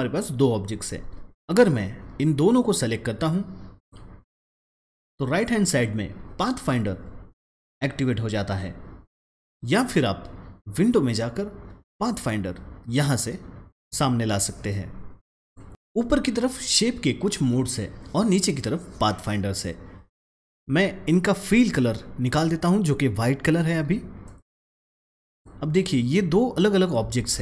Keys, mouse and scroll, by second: 2.4-3.6 drag, 9.4 click, 13.7-15.7 drag, 20.5-24.1 drag, 24.2 click, 27.1 ctrl+z.